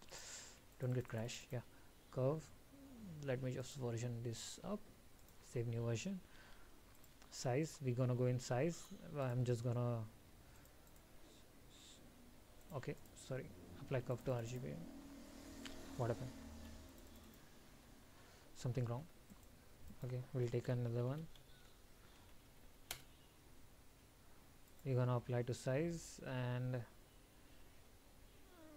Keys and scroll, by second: 0.6 ctrl+s.